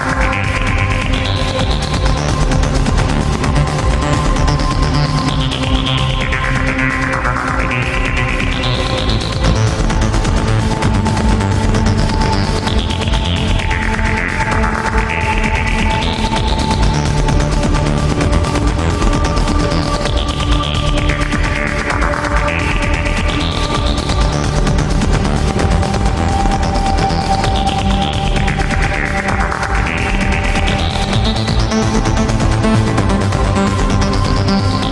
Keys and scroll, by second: 0.2 alt+space, 0.7 alt+space, 1.8 alt+space, 4.0 ctrl+z, 6.3 ctrl+z, 7.5 alt+space, 7.9 alt+space, 11.1 alt+space, 11.6 alt+space, 12.3 alt+space, 12.6 alt+space, 13.1 alt+space, 13.6 alt+space, 14.6 alt+space, 15.5 alt+space, 17.1 alt+space, 18.9 ctrl+z, 20.1 alt+space, 21.1 alt+space, 22.2 alt+space, 22.6 alt+space, 24.6 alt+space, 25.3 alt+space, 26.5 alt+space, 29.3 ctrl+z, 34.4 alt+space.